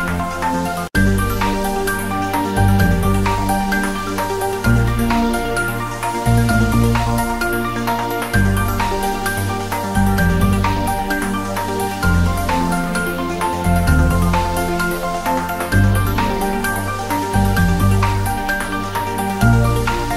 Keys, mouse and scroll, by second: 0.3 click, 0.7-1.2 scroll down 1, 1.2-1.6 scroll up 1, 1.6 s, 1.9 z, 2.4 click, 2.8 g, 3.5 click, 3.6-4.4 scroll up 1, 4.4 r, 4.8 click, 5.0 g, 6.3 click, 6.6-6.9 scroll down 1, 6.9 click, 7.1-7.6 scroll down 1, 7.6 g, 9.3 click, 9.3-10.1 typing, 10.7 click, 11.0-11.6 scroll down 1, 14.4 scroll up 1, 14.7 click, 15.8 scroll down 1, 16.0 s, 17.1 click, 17.2 s, 18.3 click, 18.4-18.8 scroll up 1, 18.8 g, 19.8 click.